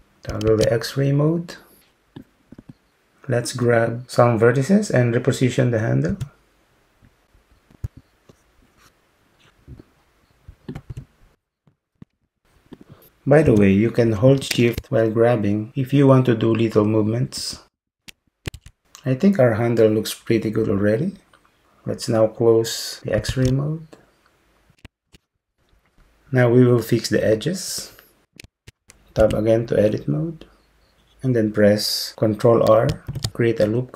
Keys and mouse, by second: 0.5 alt+z, 2.2-7.3 drag, 6.1 g, 7.6 click, 7.8 g, 8.3 Tab, 8.6 click, 8.9 g, 9.5 Tab, 10.1 g, 10.5 Tab, 10.7 click, 10.9 g, 11.5 Tab, 11.6 click, 11.9 g, 12.4 Tab, 12.7-18.0 drag, 13.6 g, 18.0 g, 18.6 Tab, 23.3 alt+z, 29.3 Tab, 33.1 ctrl+r.